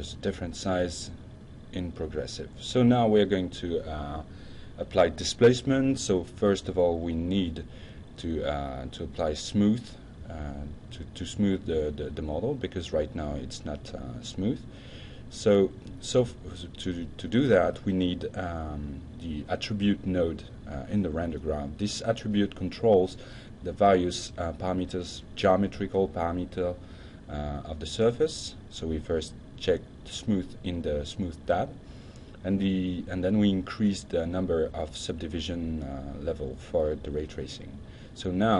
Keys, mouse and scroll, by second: 2.2 click, 14.7 click, 15.2-15.6 drag, 15.7 drag, 16.2 click, 18.3-19.6 typing, 20.0 Return, 20.9-21.5 drag, 21.8-22.3 drag, 24.2 click, 26.5 click, 28.4 click, 29.5 click, 30.4 click, 31.7-32.1 drag, 32.3 click, 33.5 click, 34.2 F5.